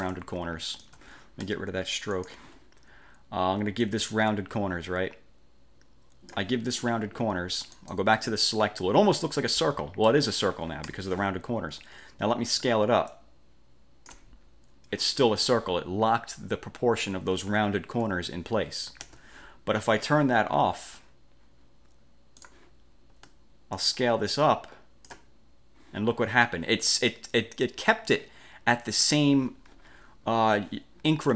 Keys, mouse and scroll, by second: 0.3 ctrl+shift+click, 2.3 shift+click, 3.9-6.6 drag, 7.9 click, 9.1 ctrl+scroll up 2, 10.2 middle click, 11.0 1, 13.2-14.4 ctrl+shift+drag, 18.1 F4, 19.1 ctrl+z, 20.6 F1, 22.5 click, 23.9-25.3 ctrl+shift+drag, 30.4 F4.